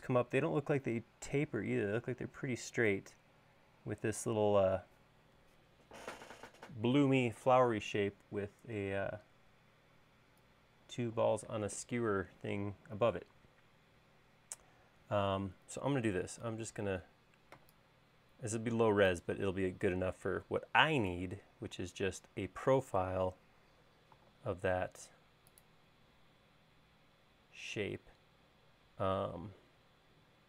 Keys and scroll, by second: 16.8 shift+super+4, 21.1 super+Tab.